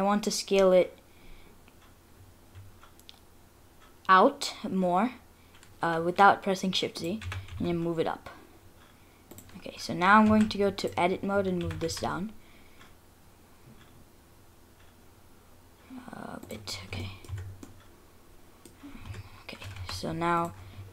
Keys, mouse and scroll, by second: 7.2 g, 10.3 2, 10.8 alt+click, 11.6 g, 16.7-17.7 scroll down 6, 17.0 middle click, 17.3 Tab, 17.7 middle click, 18.9 scroll up 2, 19.1 Tab, 19.8 3, 20.4 alt+click.